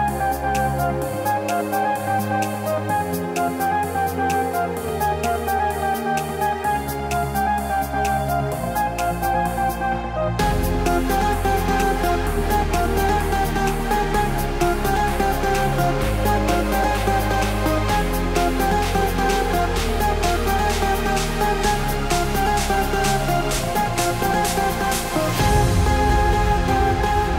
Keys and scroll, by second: 26.7 ctrl+BackSpace.